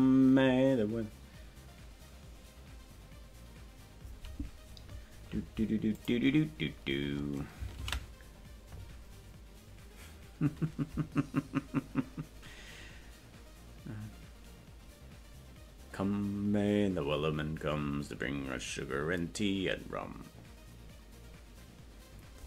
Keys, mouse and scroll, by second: 6.0 click.